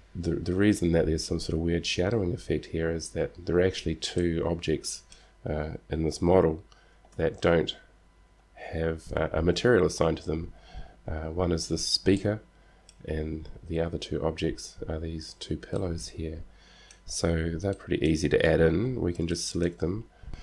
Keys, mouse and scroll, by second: 4.3-6.4 middle drag, 7.4 z, 8.1 middle click, 10.8-12.6 middle drag, 14.4-17.0 middle drag, 17.7 middle click, 18.4 middle click, 18.8-19.8 middle drag.